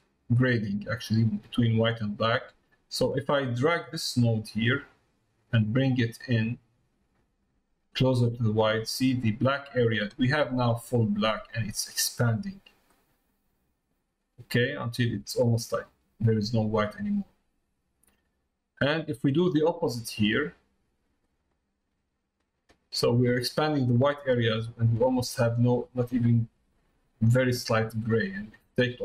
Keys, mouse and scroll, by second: 3.9-10.2 drag, 12.9-19.0 drag, 19.9 click, 21.3-25.3 drag, 25.8 middle click, 27.5 middle click.